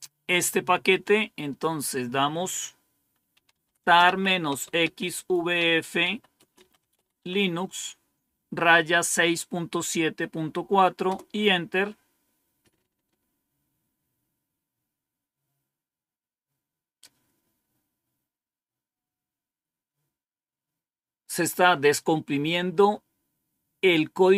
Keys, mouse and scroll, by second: 0.9-2.0 scroll down 1, 2.0-2.4 scroll down 1, 3.0-7.3 typing, 11.0 Return.